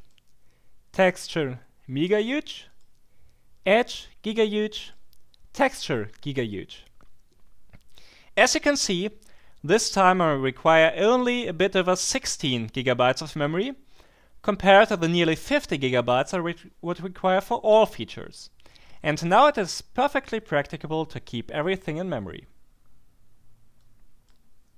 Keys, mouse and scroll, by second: 0.0 click, 2.6 click, 4.8 click, 6.4 click, 23.8-24.7 drag.